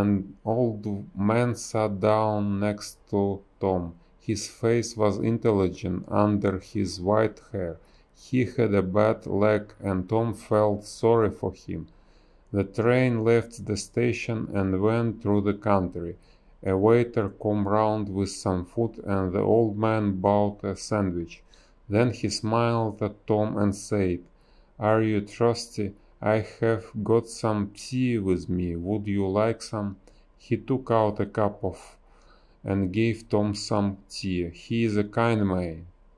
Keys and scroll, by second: 1.4 space, 2.9 space, 4.8 space, 5.3 ctrl+z, 5.4 space, 7.2 a, 8.1 space, 10.9 space, 12.6 space, 14.3 space, 16.0 space, 16.4 b, 21.1 space, 25.6 space, 28.1 space, 30.8 space, 33.5-36.1 typing.